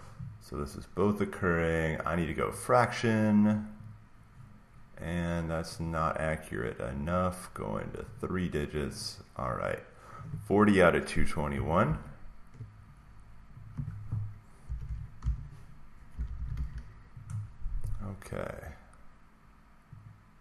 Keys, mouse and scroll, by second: 2.3 click, 3.8 click, 5.8 click, 6.9 click, 8.1 click, 8.9 click, 11.4 click, 11.8 alt+Tab, 13.6 click, 14.3-17.1 typing, 17.2 click, 20.0 click.